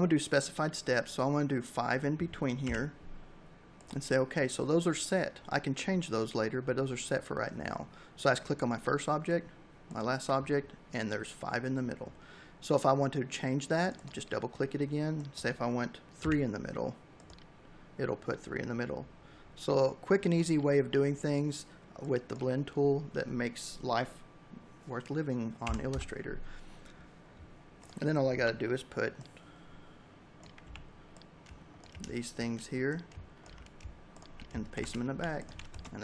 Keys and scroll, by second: 1.4 5, 15.8 3, 24.4 9, 24.6 Return, 27.1 m, 29.4 v, 33.4 ctrl+shift+[, 33.8 v, 34.4 space.